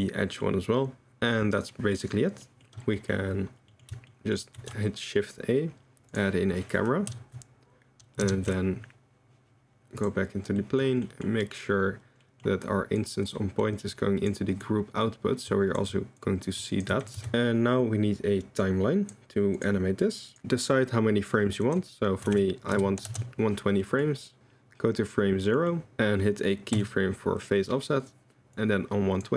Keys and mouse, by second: 1.1 middle click, 1.6 middle click, 2.9 middle click, 3.7 middle click, 4.1 shift+middle drag, 4.5 shift+a, 8.2 ctrl+alt+KP_0, 10.6 click, 13.0-15.8 drag, 16.2 click, 16.2 click, 17.0 click, 17.2 x, 18.6 click, 19.5 click, 21.7-23.2 drag, 23.8 click, 25.4 drag, 25.8 click, 26.7 i, 28.5 click.